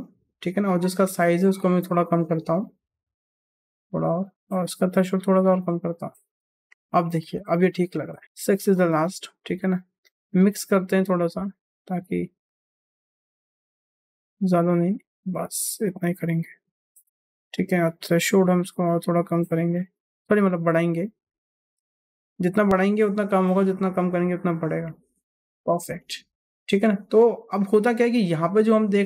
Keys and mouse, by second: 1.1 click, 1.6 click, 2.3 click, 3.0 click, 4.5 click, 5.4 click, 8.6 middle click, 9.9-13.4 drag, 14.1 click, 17.8-21.7 drag, 22.8 click, 23.9 click, 25.9 shift+middle click.